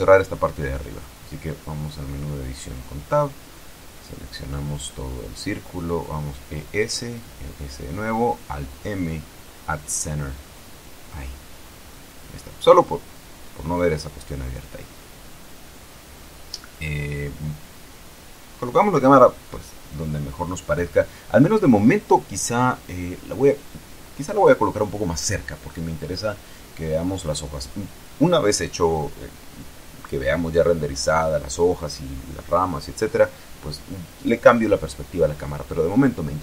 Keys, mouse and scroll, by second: 0.7 right click, 1.3 Tab, 2.5 right click, 5.1 alt+shift+right click, 6.3 alt+shift+e, 6.5 shift+s, 7.2 click, 7.3 e, 7.6 s, 8.1 click, 8.9 alt+m, 11.1 click, 12.7-14.0 shift+middle drag, 14.2-14.6 shift+scroll down 4, 14.6 shift+middle click, 15.8 ctrl+alt+KP_0, 17.0 Tab, 17.8 right click, 18.7 g, 23.3 click, 24.1 r, 25.1 click, 25.3 g, 26.6 click, 27.3 g, 27.4 middle click, 29.1 click, 29.8 g, 31.4 click, 35.6 right click.